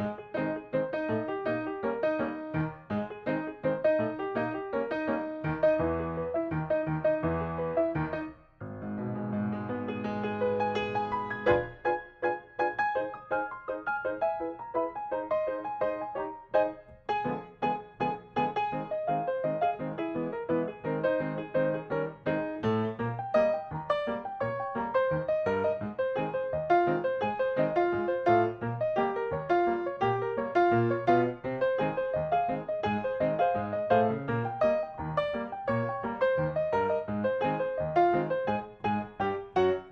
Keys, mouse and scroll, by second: 0.2 p, 1.7 scroll down 1, 2.0 click, 3.3 g, 4.1 m, 5.0 click, 6.4 k, 6.6 scroll up 1, 7.3 click, 7.7 shift+middle click, 8.5-8.8 scroll down 1, 8.8 middle click, 10.2 click, 10.7 middle click, 11.0 click, 12.6 right click, 14.1 click, 14.5 middle click, 15.3-16.7 drag, 16.7 Delete, 17.1-17.5 scroll up 1, 17.5 middle click, 18.0 click, 18.7 Delete, 18.9 middle click, 19.9-20.4 scroll up 1, 20.4 click, 20.9 Delete, 21.3 click, 21.5 Delete, 22.2 Delete, 22.3 middle click, 22.8 click, 23.1 Delete, 23.3 click, 23.5 Delete, 24.6 middle click, 24.9-25.3 scroll up 1, 25.3 click, 25.5 Delete, 25.6 middle click, 26.3 click, 26.4 Delete, 26.9 Delete, 27.1 middle click, 27.6 click, 27.9 Delete, 28.1 middle click, 28.7 click, 28.9 Delete, 29.4 Delete, 29.8 Delete, 30.1 middle click, 31.2 shift+scroll down 1, 31.2 middle click, 31.6 middle click, 31.7 scroll down 1, 32.7 shift+middle click, 33.3 click, 33.7 middle click, 34.4 click, 35.8 Delete, 36.0-38.0 middle drag, 38.1 shift+middle click, 39.1-39.9 drag.